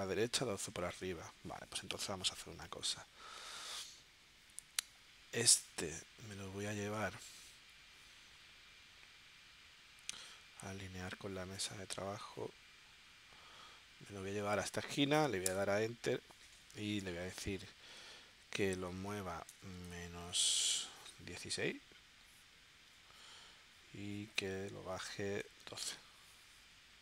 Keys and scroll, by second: 1.0 super+Tab, 15.5 Return, 18.6 1, 19.5 BackSpace, 25.1-25.9 typing.